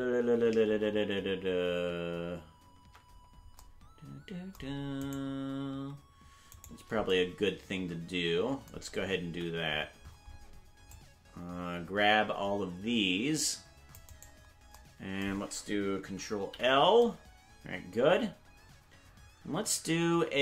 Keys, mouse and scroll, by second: 2.8 ctrl+Tab, 5.1 right click, 5.8 Tab, 6.5 right click, 9.3 c, 16.4 ctrl+l.